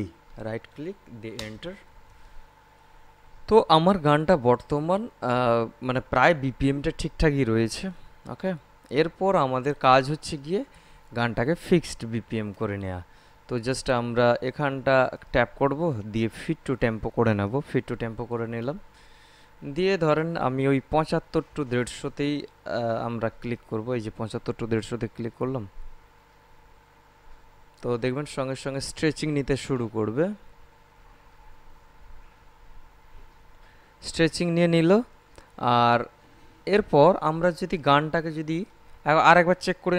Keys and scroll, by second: 1.2 Return.